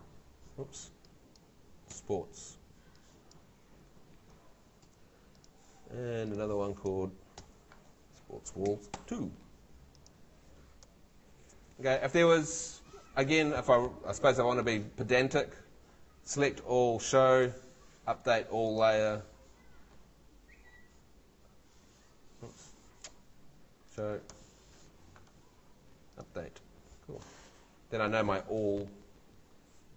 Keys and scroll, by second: 1.9 s, 4.8 super+c, 7.4 super+v, 8.7 BackSpace, 9.0 2, 27.4 Escape.